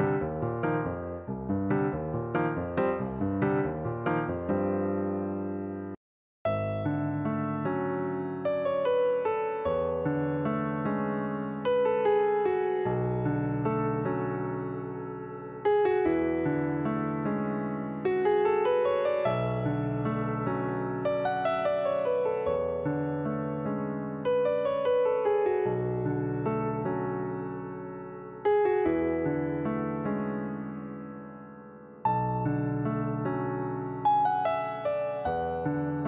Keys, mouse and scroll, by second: 1.1 click, 1.8 click, 2.8-9.5 right drag, 9.5-10.7 middle drag, 10.7 click, 11.5 click, 11.9 alt+click, 15.3 click, 16.2-17.7 shift+middle drag, 17.7 click, 19.2 click, 20.3 click, 24.6 click, 28.6-31.1 drag, 31.6-34.1 drag, 35.4-36.0 drag.